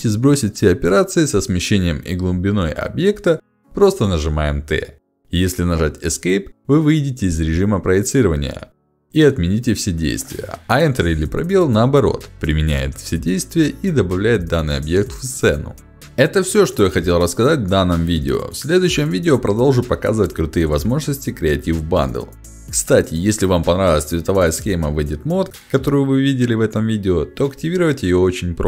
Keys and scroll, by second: 2.8 t, 6.7 Escape, 7.6 5, 8.7 ctrl+shift+x, 11.2 2, 13.4 space, 14.8 space.